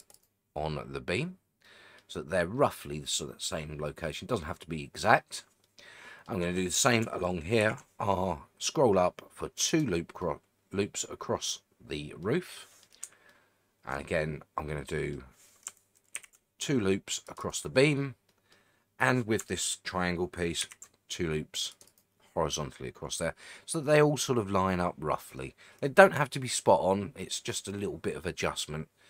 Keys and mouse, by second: 0.1 right click, 1.6 middle click, 5.6 middle click, 7.6 ctrl+r, 9.7 right click, 10.2 middle click, 12.2 middle click, 13.3 shift+middle click, 14.8 middle click, 16.1 ctrl+r, 17.4 right click, 18.3 middle click, 20.6 ctrl+r, 21.8 right click, 22.7 middle click, 26.5-29.0 middle drag.